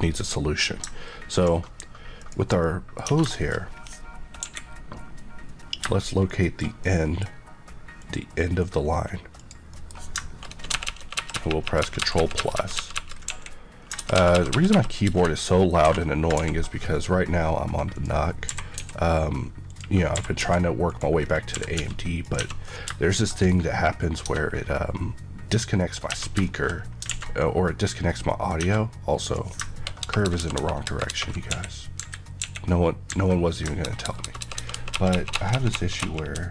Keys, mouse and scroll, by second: 15.0 KP_Add, 15.8-16.3 typing, 16.9 click, 18.4-18.7 typing, 19.6 click, 20.1 typing, 20.8 click, 21.1 scroll, 21.1 scroll down 1, 21.4 e, 21.7 x, 22.1 click, 22.3 Tab, 23.2 middle click, 23.4 scroll up 1, 24.2 Tab, 24.5-25.5 scroll down 1, 26.0 Tab, 26.4 middle click, 26.7 scroll down 2, 27.0 alt+a, 27.3 middle click, 28.1 middle click, 28.6 Tab, 29.1 click, 29.9 ctrl+KP_Add.